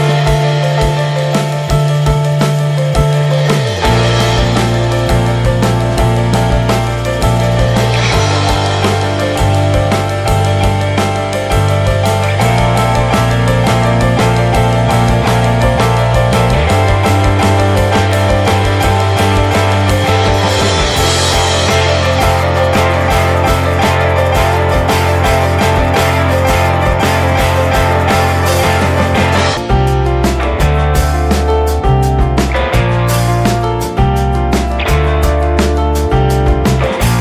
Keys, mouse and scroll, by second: 0.0-2.4 drag, 2.4-2.7 scroll up 1, 2.7-3.6 scroll down 1, 3.6-4.0 scroll down 1, 4.0-4.5 drag, 4.5-5.1 middle drag, 5.1-6.1 shift+scroll up 1, 8.0-11.5 drag, 11.5-12.7 scroll down 7, 14.0 click, 14.7 middle click, 15.0 click, 17.3 n, 17.8 middle click, 18.1 ctrl+s, 18.4 shift+middle click, 19.1 ctrl+s, 20.0 drag, 20.5-23.3 drag, 27.1-32.7 drag, 33.2 middle click, 34.1 click, 35.3 click, 35.8 click, 36.3 scroll down 2, 36.5 drag, 37.1 drag.